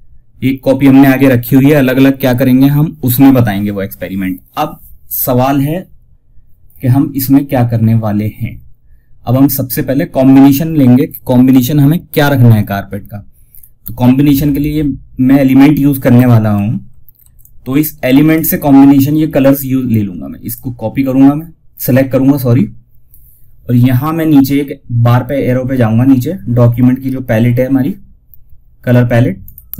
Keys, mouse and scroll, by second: 12.8-13.2 scroll up 2, 16.5 F2, 16.7-19.8 drag, 28.7 click.